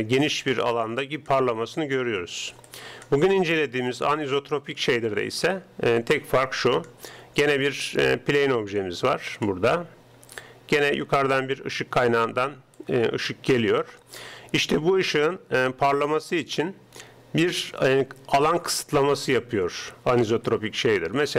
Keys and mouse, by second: 0.0-21.3 typing, 6.1-9.5 drag, 10.5-12.1 drag, 12.8-14.5 drag, 14.5 click, 20.6-21.3 drag.